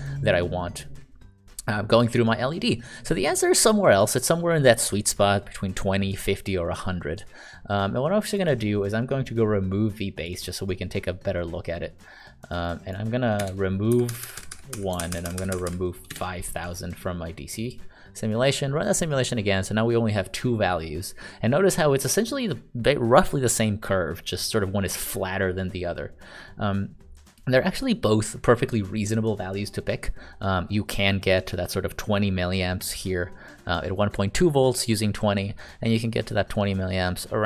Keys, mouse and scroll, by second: 8.2 click, 13.4 BackSpace, 13.9 Right, 14.0 Right, 14.2 Right, 14.3 Right, 14.5 Right, 14.7 Right, 15.2 shift+Right, 15.3 shift+Right, 15.5 shift+Right, 16.1 BackSpace.